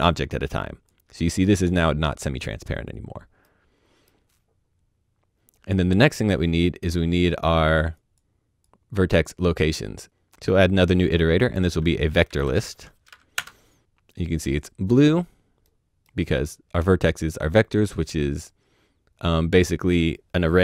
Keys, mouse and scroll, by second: 3.0 click, 3.4 middle click, 7.1-7.9 scroll down 1, 7.9 click, 10.6 click, 12.2 click, 12.4 typing, 13.3 Return, 15.2-15.6 scroll down 1, 15.6 middle click.